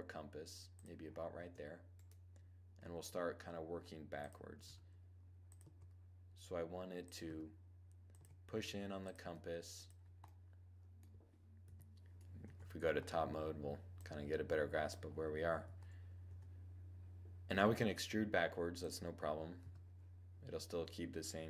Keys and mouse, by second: 0.3-2.3 drag, 2.3-3.3 right drag, 2.4 g, 4.2-5.5 drag, 4.2 r, 5.1 g, 6.8 r, 7.6 g, 8.5-11.5 drag, 8.7 r, 11.1 7, 11.9 Tab, 13.5-15.2 drag, 15.2 Tab, 15.7 1, 17.0 e, 18.3-20.2 drag, 19.2 r, 21.3-21.4 drag.